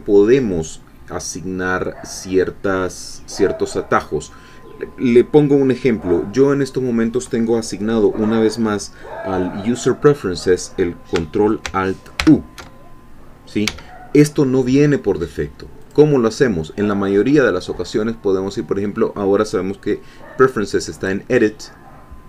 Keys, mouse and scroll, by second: 12.2 ctrl+alt+u, 13.6 Escape, 15.8 click, 21.0 click.